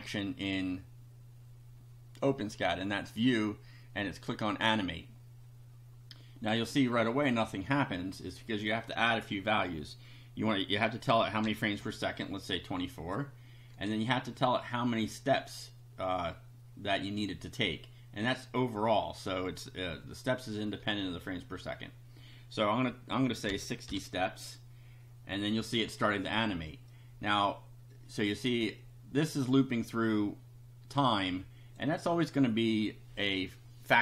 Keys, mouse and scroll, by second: 2.3 click, 4.3 click, 8.2 click, 11.4 2, 11.8 4, 12.9 click, 23.5 6, 24.3 0, 26.9 click, 31.0 click, 32.7-34.0 middle drag.